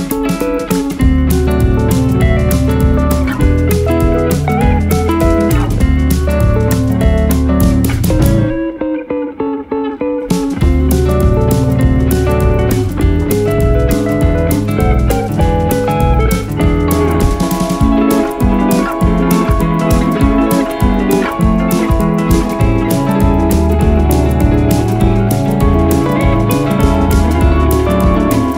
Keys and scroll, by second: 0.9 shift+Page_Down, 1.5 Escape, 1.9 F2, 4.1 F3, 6.5 ctrl+g, 6.8 F4, 11.7 space, 12.3 shift+F2, 12.7 F3, 17.9 t, 18.3 Escape, 19.5 c, 19.8 Escape, 23.1 c, 25.3 c, 26.3 Escape.